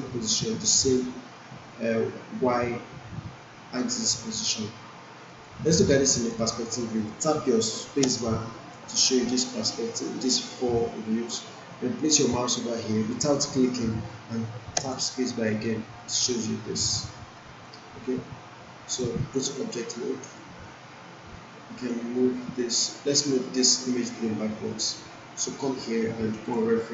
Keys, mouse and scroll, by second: 5.3 click, 8.0 space, 14.8 space, 16.3-17.8 alt+drag, 19.0-19.9 right click, 20.3 click, 26.4-26.9 drag.